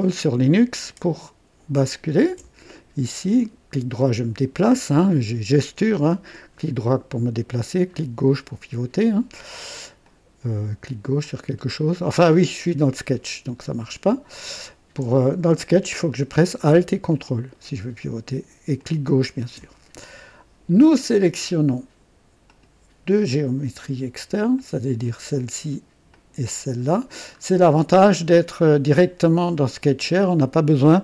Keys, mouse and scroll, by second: 0.4-2.5 ctrl+alt+drag, 2.7 ctrl+alt+right click, 4.3-4.7 scroll up 2, 6.8 right click, 8.4-9.9 drag, 10.1 click, 11.2 click, 13.1-13.5 scroll up 1, 13.7 right click, 17.1-18.7 ctrl+alt+drag, 18.8 ctrl+alt+click, 22.5 click, 24.5 click, 26.1 click, 27.4-27.7 scroll down 1.